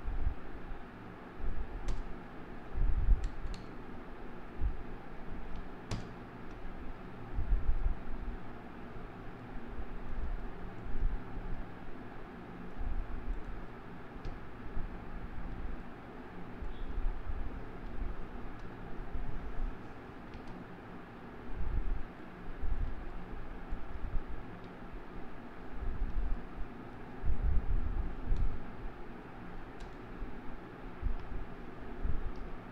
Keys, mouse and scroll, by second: 2.0 KP_0, 3.6 KP_0, 4.4 scroll up 4, 4.9 scroll down 1, 5.6 ctrl+space, 6.0 ctrl+KP_0, 7.0-7.8 scroll down 13, 8.9-9.4 scroll down 12, 9.4-11.2 middle drag, 11.2-11.6 scroll up 2, 11.6-13.5 middle drag, 13.5 click, 14.3 KP_Decimal, 14.5 middle click, 15.1-15.9 scroll down 5, 15.9-17.9 shift+middle drag, 17.9 n, 20.5 ctrl+space, 20.9-21.9 scroll down 5, 22.2-24.7 middle drag, 24.7 KP_Decimal, 25.5-26.1 scroll down 7, 26.5-27.4 shift+middle drag, 27.4-27.7 scroll down 2, 28.6 KP_0, 29.9 KP_0.